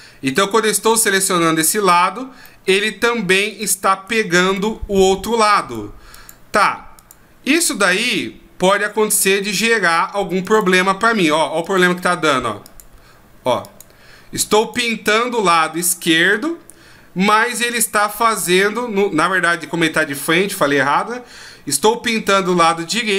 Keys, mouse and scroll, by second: 0.3 right click, 0.9 middle click, 2.4 middle click, 3.5 right click, 4.1 right click, 4.5 right click, 5.6 click, 6.1 click, 7.7 click, 9.4 middle click, 10.4 click, 11.6 click, 12.6 click, 13.6 click, 14.6 click, 16.3 r.